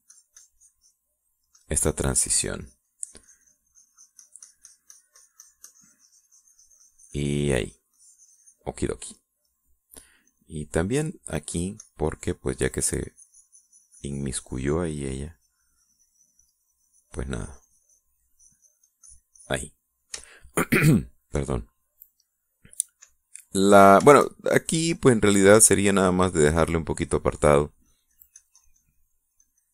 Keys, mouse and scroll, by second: 2.0 middle click, 9.7 middle click, 11.2 click, 11.5 middle click, 12.4-16.0 drag, 16.1-19.1 drag, 19.2-20.6 drag, 20.6 middle click, 21.1-22.2 shift+middle drag, 22.9 middle click, 23.6 middle click, 24.2 middle click, 25.4 shift+click, 25.9 shift+click, 26.2 shift+click, 26.7-28.4 shift+drag, 28.5-29.7 shift+drag.